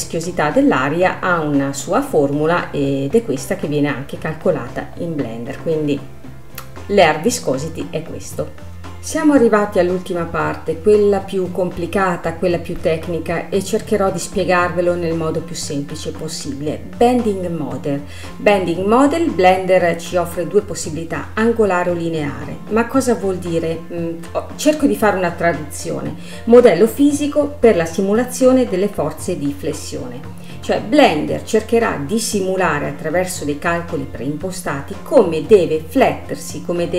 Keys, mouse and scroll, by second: 20.7-23.8 drag, 35.3-36.9 drag.